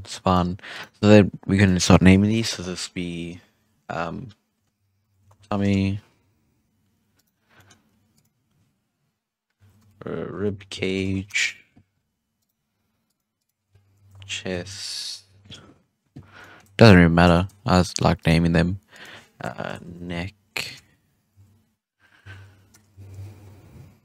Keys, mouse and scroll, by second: 0.2 right click, 0.7 right click, 1.5-4.6 drag, 5.3 m, 7.1 right click, 7.5 middle click, 8.1-11.2 drag, 12.3 right click, 13.0 click, 13.3-16.3 drag, 16.3 middle click, 16.9-17.3 scroll up 4, 17.3 shift+middle click, 18.1 right click, 18.8-22.0 drag, 22.8 BackSpace.